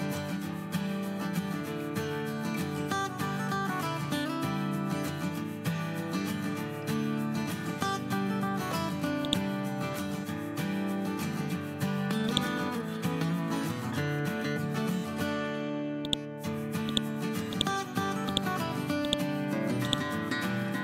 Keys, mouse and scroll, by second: 0.2 scroll up 1, 1.2 scroll down 1, 7.8 scroll up 1, 9.2-11.6 shift+drag, 12.6 scroll down 1, 13.2 scroll up 1, 13.8 scroll down 1, 14.6 scroll up 1, 15.9 click.